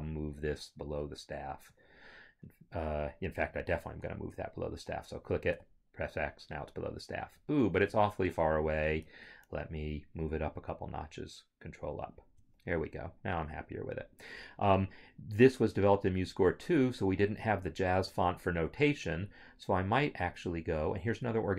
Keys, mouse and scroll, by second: 5.5 click, 5.6 x, 7.9 click, 9.0 Escape, 10.2 ctrl+Up.